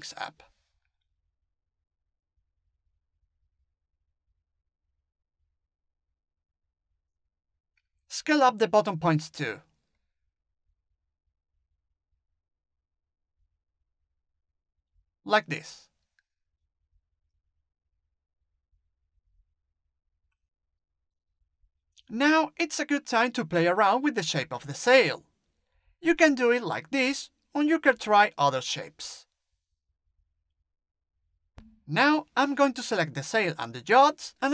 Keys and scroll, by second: 9.9 space, 11.9 t, 18.9 space, 20.7 t, 29.5 space.